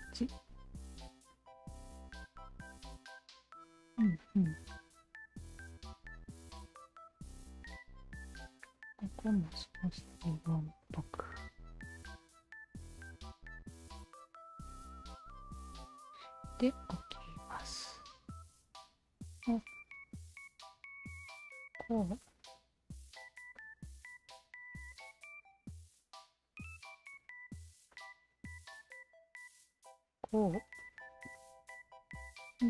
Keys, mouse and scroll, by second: 1.1 alt+click, 7.5 alt+click, 8.7 alt+click, 9.7 alt+click, 10.8 alt+click, 11.6 click, 12.4 alt+click, 13.9-15.2 alt+drag, 15.7 alt+click, 16.6 alt+click, 18.5 shift+click, 20.1 shift+click, 21.1 shift+click, 22.3 alt+shift+click, 23.6 shift+click, 23.9 alt+right click, 24.3 alt+click, 24.9-26.3 alt+drag, 26.8 alt+click, 27.9 alt+click, 28.7 shift+click, 29.8-31.1 shift+drag, 31.3-32.6 alt+shift+drag.